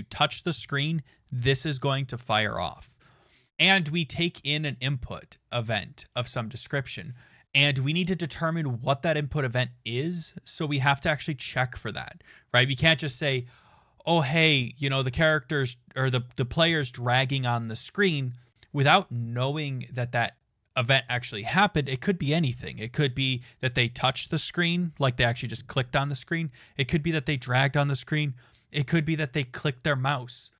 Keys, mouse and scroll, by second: 4.2 click, 4.3 click, 6.3 click, 10.3 click, 11.3-30.5 drag.